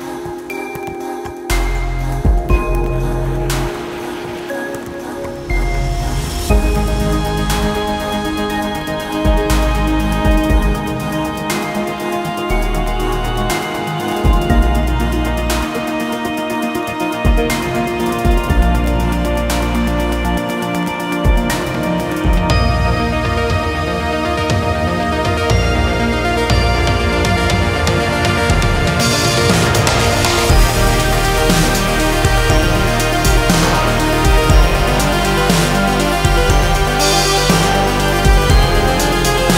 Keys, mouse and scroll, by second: 6.6 right click, 6.8 right click, 10.3 ctrl+z, 11.1 right click, 27.2 right click, 39.4 click.